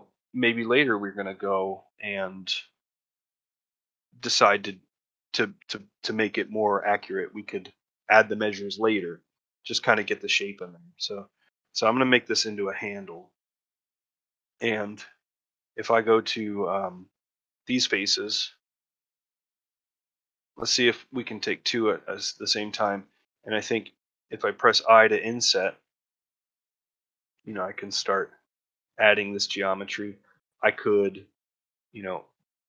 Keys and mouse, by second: 9.6 middle click, 10.7 middle click, 11.9 middle click, 12.4 shift+middle click, 12.8 middle click, 13.8 shift+middle click, 14.1 ctrl+middle click, 14.5 shift+middle click, 17.5 middle click, 18.0 middle click, 20.3 shift+click, 20.9 middle click, 21.7 middle click, 22.1 shift+middle click, 22.5 middle click, 29.0-30.6 middle drag.